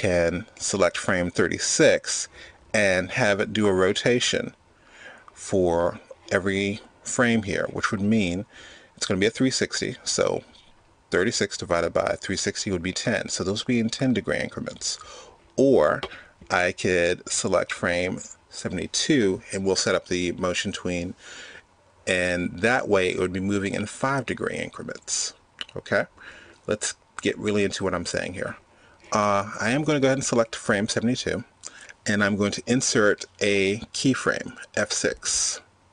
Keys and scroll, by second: 32.1 F6.